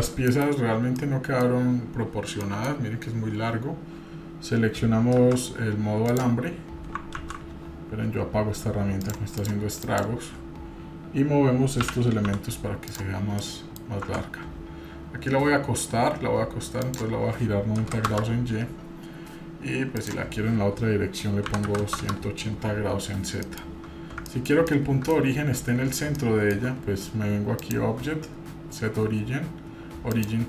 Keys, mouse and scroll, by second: 0.3 KP_Divide, 0.7 scroll down 1, 1.0 middle click, 2.1-2.4 scroll down 1, 2.4 middle click, 5.2 shift+z, 6.1 click, 7.2 ctrl+z, 9.0 click, 9.4 click, 9.8 click, 11.8 g, 13.2 scroll down 2, 13.4 middle click, 14.0 Tab, 14.3-14.7 scroll up 1, 16.8-18.7 drag, 20.0-22.6 drag, 23.4 middle click, 23.9-24.5 scroll up 2, 24.3 middle drag, 24.7-25.1 middle drag, 26.2 shift+middle click, 27.6-30.2 drag.